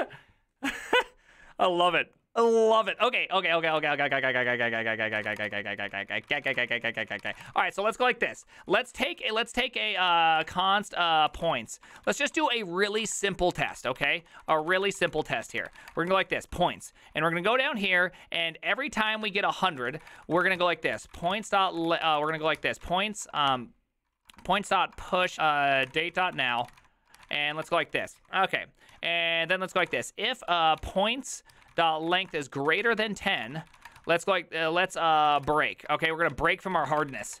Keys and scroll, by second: 3.4-17.2 typing, 6.3 ctrl+c, 18.2-37.4 typing.